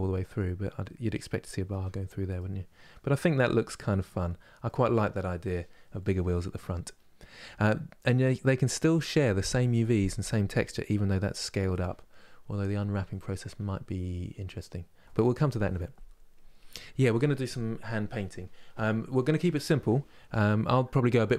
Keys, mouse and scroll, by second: 3.9-4.3 scroll down 1, 4.3-7.4 middle drag, 7.4-10.6 scroll up 2.